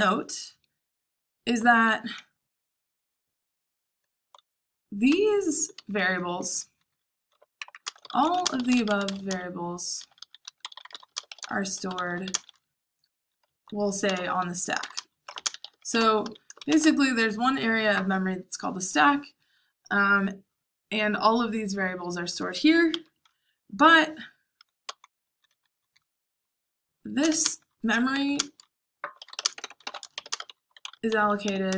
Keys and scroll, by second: 5.0-11.9 typing, 13.2-16.4 typing, 22.8 Escape, 23.3-30.9 typing.